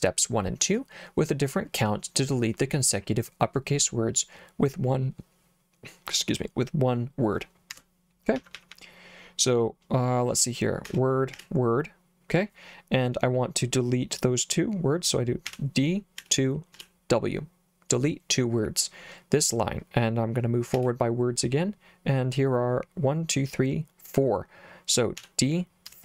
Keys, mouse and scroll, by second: 7.7 Escape, 8.4 j, 8.6 j, 8.7 j, 10.9 w, 11.4 w, 15.5 d, 16.2 2, 16.8 w, 20.8 w, 25.2 d, 25.9 4.